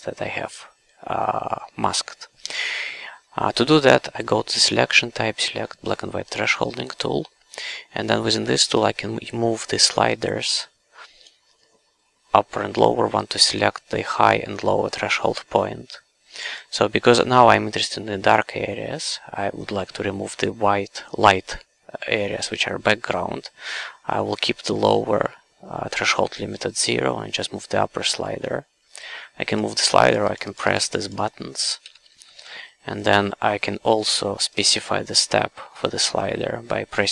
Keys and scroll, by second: 31.8 w, 33.1 q.